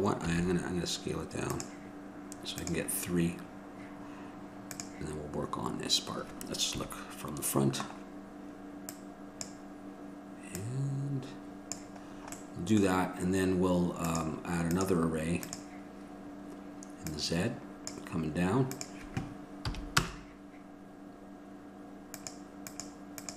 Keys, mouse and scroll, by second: 0.5 s, 4.0-7.0 drag, 7.0 KP_1, 8.0-9.6 middle drag, 9.6 click, 12.3-15.7 middle drag.